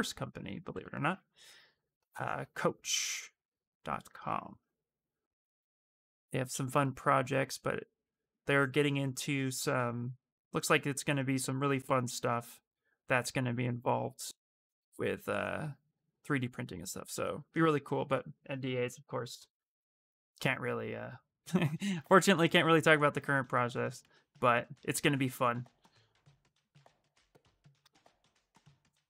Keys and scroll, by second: 21.0 s.